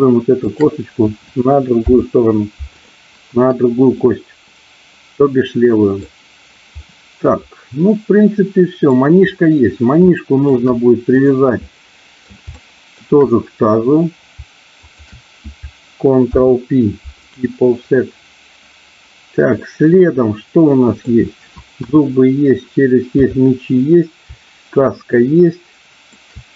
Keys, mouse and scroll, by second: 0.4 shift+click, 1.8 ctrl+p, 3.9-5.9 middle drag, 6.8-8.9 middle drag, 10.0 shift+middle click, 11.5 middle click, 12.5 shift+middle click, 14.8 shift+click, 16.3 ctrl+p, 19.5-21.0 middle drag, 21.8 KP_1, 23.2 KP_3, 24.8-26.2 middle drag.